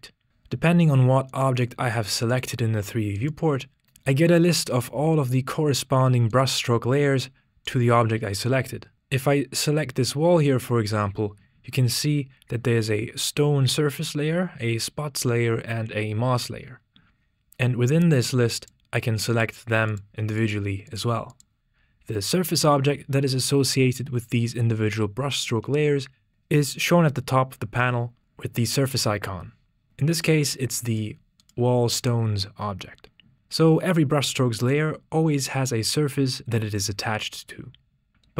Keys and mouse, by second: 1.3 right click, 2.2 right click, 3.2 right click, 6.7 right click, 7.7 right click, 18.9 click, 19.4 click, 20.0-21.2 drag, 21.4-26.6 drag, 30.4 click, 31.0 click, 31.5 click.